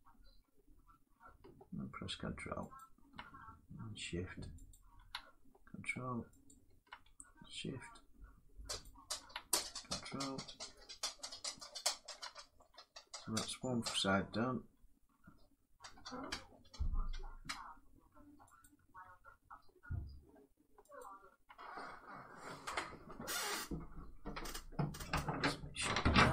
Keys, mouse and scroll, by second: 2.5 ctrl+click, 4.4 shift+click, 6.2 ctrl+click, 7.6 ctrl+click, 8.5 shift+click, 11.5 ctrl+click, 13.8 shift+click, 13.8 middle click, 15.0-15.3 scroll, 18.3 middle click, 18.3 shift+click, 20.7 ctrl+click, 21.1 scroll.